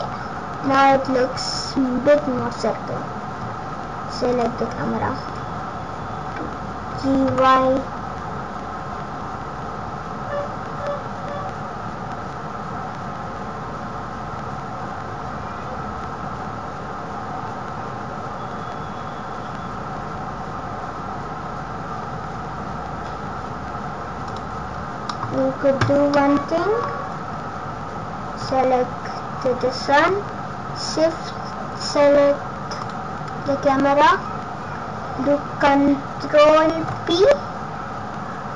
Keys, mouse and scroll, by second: 0.6-1.4 scroll down 11, 1.3 scroll up 7, 4.3 click, 6.8 g, 24.6-25.9 scroll down 11, 25.1 middle click, 26.1 middle click, 28.4 click, 32.8 shift+click, 33.9 scroll up 4, 34.8-35.6 scroll down 3, 36.8 ctrl+p.